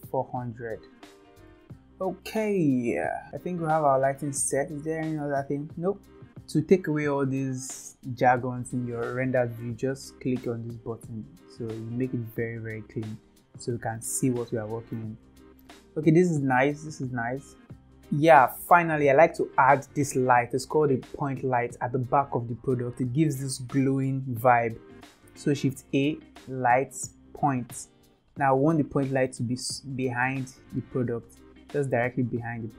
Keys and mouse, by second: 0.8 click, 1.7 KP_0, 4.4 shift+middle click, 5.3-6.3 middle drag, 11.3 click, 14.2-15.0 shift+middle drag, 17.8-24.9 drag, 25.7 shift+a, 28.7-29.2 middle drag, 30.2-31.1 drag, 31.8-32.6 drag.